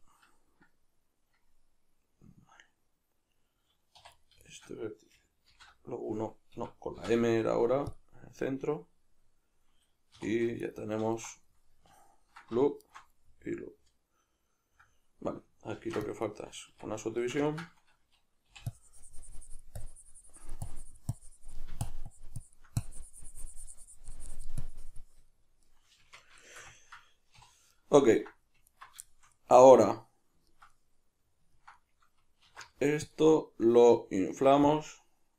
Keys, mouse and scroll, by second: 4.0 1, 4.1 right click, 4.5 shift+right click, 5.5 alt+m, 6.5 Escape, 7.0 m, 10.2 3, 10.6 alt+right click, 11.5-12.8 middle drag, 12.8 alt+shift+right click, 13.2-16.3 middle drag, 15.8 ctrl+r, 16.3 right click, 16.7 Tab, 17.2-18.7 shift+middle drag, 18.7-25.3 drag, 25.3-28.7 shift+middle drag, 26.1 Tab, 27.3 3, 28.7 alt+right drag, 29.1-34.8 shift+middle drag, 32.5 alt+e, 34.8 click.